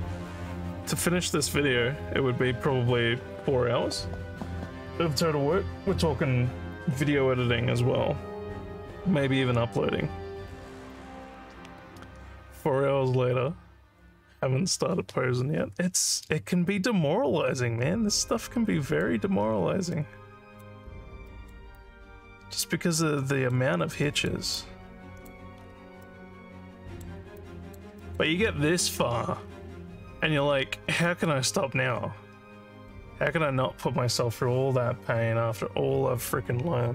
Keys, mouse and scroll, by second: 16.7-19.0 alt+drag, 19.4 scroll down 1, 20.0 alt+middle click, 20.9 scroll down 3, 21.3 alt+middle click, 21.8 alt+click, 23.2 alt+middle click, 23.7 scroll down 2, 24.1 alt+middle click, 24.6 alt+click, 25.6 alt+scroll up 4, 26.0-27.0 alt+middle drag, 27.4 alt+click, 28.0 alt+middle click, 29.4 alt+middle click, 30.4 alt+middle click, 31.1 alt+middle click.